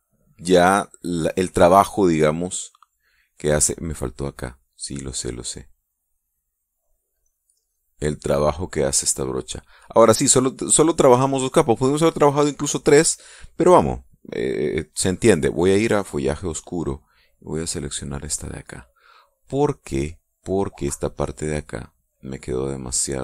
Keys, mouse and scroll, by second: 0.9 click, 2.6-4.1 drag, 5.2 click, 7.4-8.5 drag, 8.6-9.7 drag, 10.6 click, 16.6 click, 18.6 click, 21.8-23.2 drag.